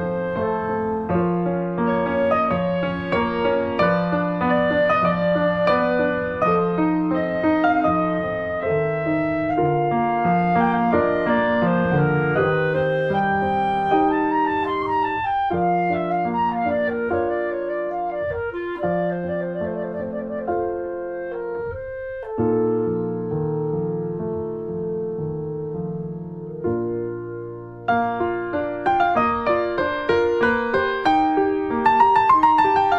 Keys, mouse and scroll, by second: 0.4 click, 0.9 middle click, 1.4 Tab, 2.2 click, 2.5 middle click, 2.9 ctrl+s, 3.5 click, 3.6 scroll down 1, 3.9 alt+middle click, 4.5 click, 4.7 alt+middle click, 5.5 click, 7.4 alt+middle click, 7.7-8.0 scroll up 1, 8.0 shift+middle click, 8.2-8.7 scroll up 1, 8.7 /, 9.2 middle click, 9.6 scroll down 3, 10.0 middle click, 10.3 scroll down 2, 10.6 shift+middle click, 11.4 shift+a, 11.5 click, 11.9 ctrl+a, 14.7 middle click, 14.8-15.3 scroll up 2, 15.3 shift+middle click, 15.7 click, 15.9 shift+middle click, 16.3-17.4 scroll up 1, 17.8 click, 18.1-18.7 scroll down 2, 18.9 click, 19.3 click, 19.6 KP_Enter, 20.0 scroll down 1, 20.1-22.0 middle drag, 22.0 click, 22.4 scroll down 1, 22.6 shift+middle click, 23.4 click, 24.3 click, 25.0 click, 25.6 middle click, 25.7 scroll up 1, 25.9 click, 26.2 scroll down 2, 26.4 middle click, 26.7 scroll up 2, 27.0-27.4 scroll down 1, 27.4 click, 27.6-28.9 shift+middle drag, 28.9 click, 29.1 middle click, 29.7 click, 30.0 s, 32.3-32.9 middle drag.